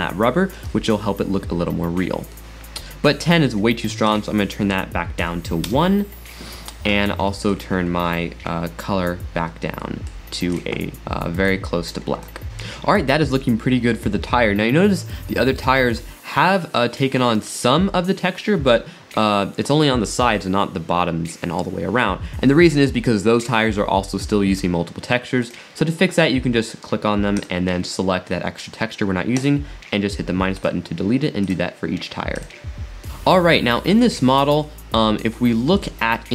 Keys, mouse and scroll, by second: 2.4-4.1 middle drag, 4.1-7.1 drag, 7.3-9.5 middle drag, 9.5 scroll up 1, 9.8-10.5 middle drag, 10.5 click, 15.3-18.4 middle drag, 25.5 click, 27.4 click, 29.3 click, 30.6 click, 31.4 click, 32.3 click, 33.0 middle click, 34.6 middle drag, 35.0 middle click, 35.1 middle click, 35.3-35.8 middle drag, 36.0-36.3 middle drag.